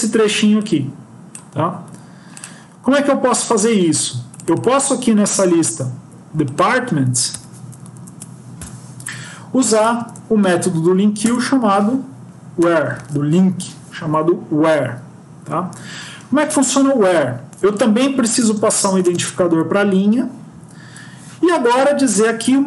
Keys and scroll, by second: 7.3 shift+End, 7.9 shift+Left, 8.5 BackSpace, 11.1 Return, 13.4 Left.